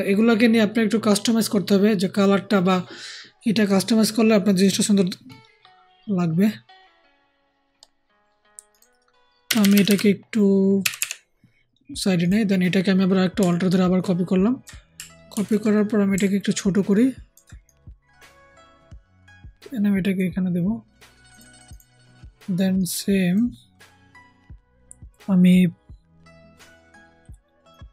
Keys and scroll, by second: 9.4 Down, 9.5 Down, 9.6 Down, 9.8 Down, 10.7 Right, 10.9 Right, 15.2 ctrl+alt+t.